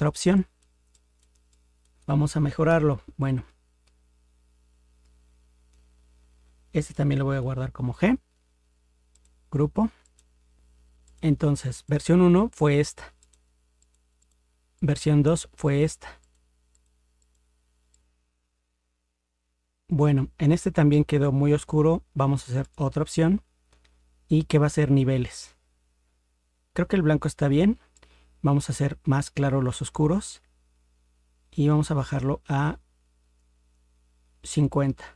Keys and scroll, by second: 2.7 ctrl+0, 7.5 ctrl+g.